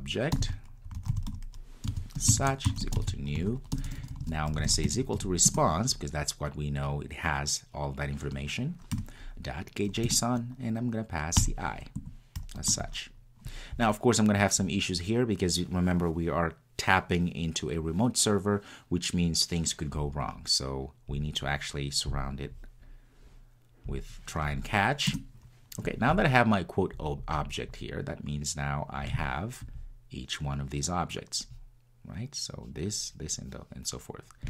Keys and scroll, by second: 5.5 Return, 10.1 Return.